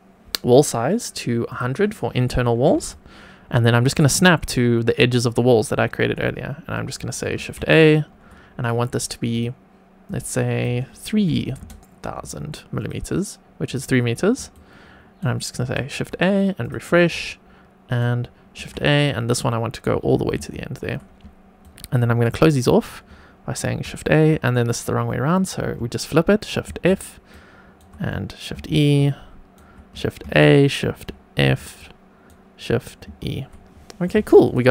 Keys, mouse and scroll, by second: 2.8 shift+right click, 7.3 shift+a, 9.3-12.7 drag, 13.6 click, 14.5 shift+right click, 15.6 shift+a, 16.6 click, 17.0 shift+right click, 18.5 shift+a, 19.0 shift+right click, 20.3 shift+e, 21.5 shift+right click, 23.6 shift+a, 26.6 shift+f, 27.2 shift+right click, 28.5 shift+e, 28.9 shift+right click, 30.2 shift+a, 31.4 shift+f, 31.7 shift+right click, 33.0 shift+e, 34.4 click.